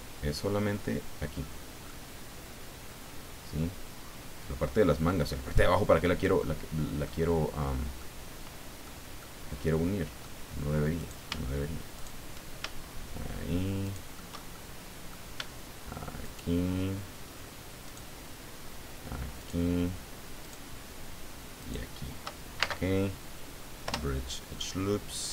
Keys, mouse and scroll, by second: 1.8 click, 1.9-4.8 middle drag, 4.8 click, 5.1-7.2 middle drag, 7.9 middle click, 9.2-10.4 right drag, 10.9 right click, 11.9 shift+right click, 13.8 shift+right click, 14.4 shift+middle click, 16.2 shift+right click, 17.8 shift+right click, 19.4 shift+right click, 20.4 shift+right click, 21.6 shift+right click, 22.6 shift+space, 23.8 Return, 24.6-25.3 drag.